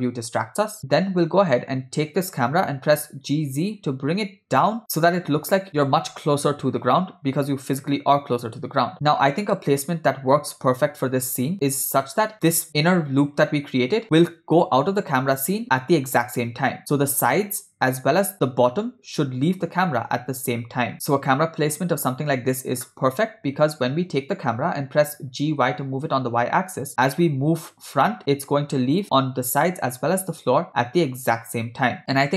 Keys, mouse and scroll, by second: 2.8 g, 21.1 g, 25.3 g.